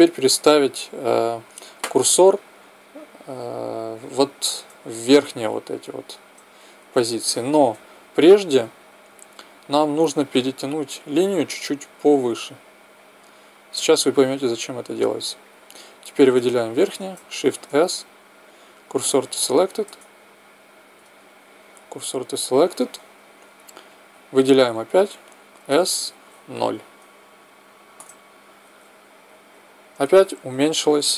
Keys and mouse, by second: 4.3 Tab, 5.1-7.1 drag, 7.1 middle click, 8.5 a, 10.2 middle click, 12.2-14.1 drag, 16.0 right click, 17.5 shift+s, 19.9 Tab, 20.9 Tab, 24.0 a, 24.2 a, 25.5 s, 29.5-31.1 middle drag.